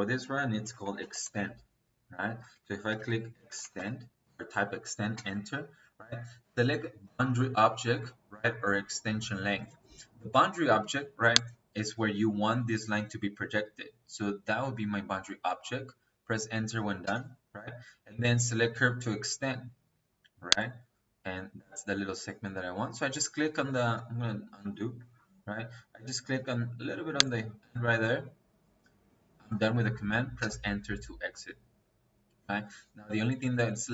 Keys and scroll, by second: 0.5-1.4 typing, 2.3 Escape, 2.8-3.8 typing, 5.0 space, 16.9 space, 30.3 space.